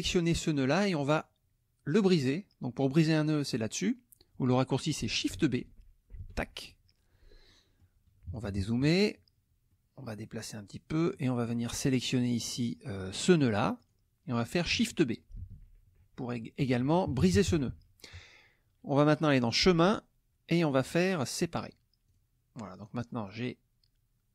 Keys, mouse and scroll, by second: 0.6 middle click, 1.2-2.2 scroll up 1, 6.1 shift+b, 7.5 middle click, 8.0-9.3 scroll up 1, 8.3 KP_Subtract, 9.3-9.7 scroll up 1, 9.7 click, 10.4-11.1 scroll up 1, 11.1 click, 11.9 click, 12.4 middle click, 12.5 click, 13.8 click, 15.4 shift+b, 16.6 KP_Subtract, 19.4 click, 21.6 click, 22.1 click, 22.8 click.